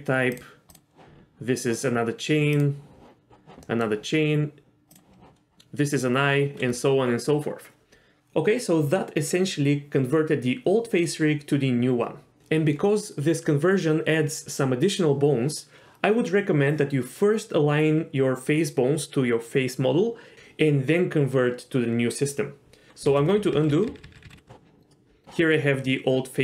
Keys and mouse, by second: 3.6 middle drag, 23.2 ctrl+z, 23.4 ctrl+z, 23.6 ctrl+z, 23.7 ctrl+z, 23.9 ctrl+z, 24.0 ctrl+z, 24.2 ctrl+z, 24.4 ctrl+z.